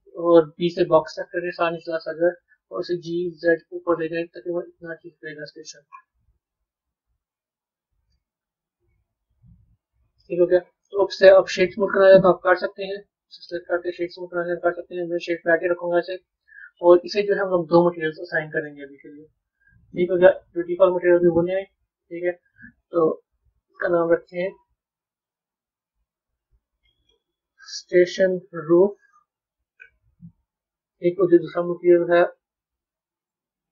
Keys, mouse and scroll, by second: 6.2-7.7 middle drag, 7.7 Tab, 8.6 z, 9.4-11.1 middle drag, 11.1-12.4 right drag, 12.4-12.9 middle drag, 12.9 drag, 13.4-15.5 right drag, 15.5-18.4 middle drag, 18.4 click, 20.2-28.4 drag, 28.4 o, 31.3-32.8 drag, 33.2-33.7 drag.